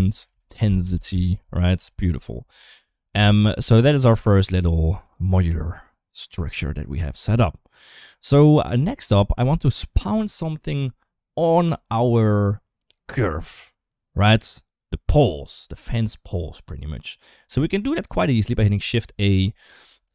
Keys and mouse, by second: 1.6 n, 3.5 ctrl+s, 3.7 click, 4.8 click, 6.4-7.8 drag, 8.3 shift+middle click, 8.9 click, 9.2 g, 17.4 middle click, 18.6 shift+a.